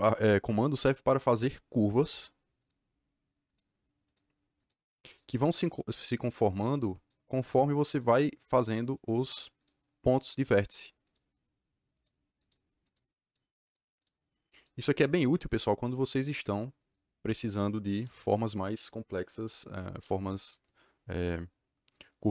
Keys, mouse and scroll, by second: 1.9 click, 2.5 click, 2.6-3.3 scroll up 2, 3.3-4.0 scroll up 3, 3.4 click, 4.0 click, 4.5 click, 5.0 click, 5.6 click, 6.1 click, 6.9 click, 7.3 click, 7.8 click, 8.9 click, 9.5 click, 10.0 click, 10.5 click, 12.3 click, 13.3 click, 13.6 click, 14.3 click, 14.6 click, 15.1 click, 15.5-16.7 drag, 16.9 click, 18.0 KP_Enter.